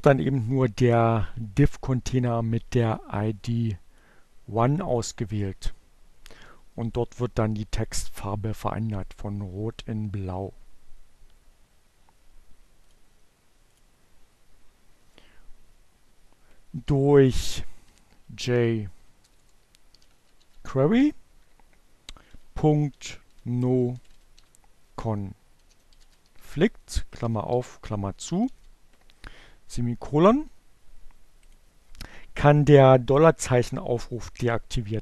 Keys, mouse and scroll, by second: 1.2-5.0 drag, 11.3 click, 11.9-13.4 drag, 13.9 Return, 16.3-19.5 typing, 21.2-27.2 typing, 30.6 click.